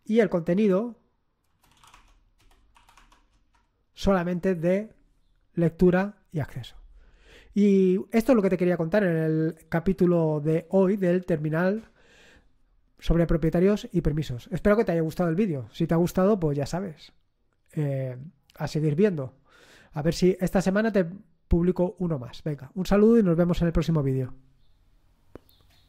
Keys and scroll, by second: 0.6 Up, 1.5-3.2 typing, 3.3 Return.